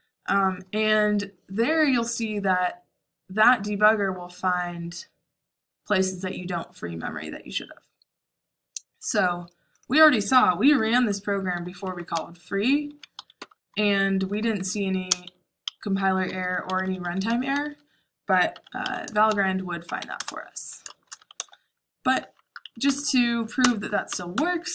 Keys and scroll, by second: 10.7 Escape, 11.2-23.1 typing, 15.6 Escape, 23.6 Return, 24.0 Up, 24.3 Up.